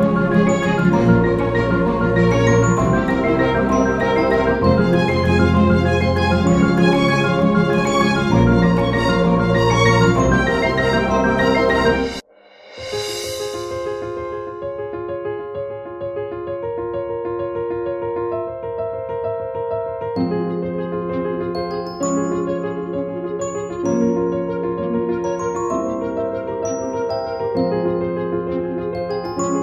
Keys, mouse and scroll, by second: 2.4 space, 11.4 space, 12.0 space, 22.6 Down, 23.5 Down, 25.7 Down, 26.5 Up.